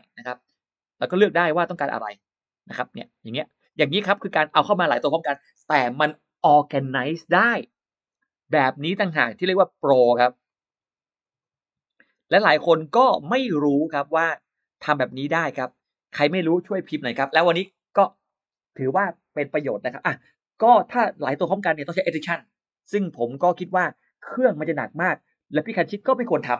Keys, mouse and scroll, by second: 1.0 click, 3.4 click, 8.6 click, 9.8 click, 10.3 middle click, 10.7 scroll down 1, 10.8 middle click, 11.1 click, 11.6 middle click, 12.3 click, 13.4 click, 13.8 middle click, 15.0 click, 16.0 click, 17.2 space, 17.5 click.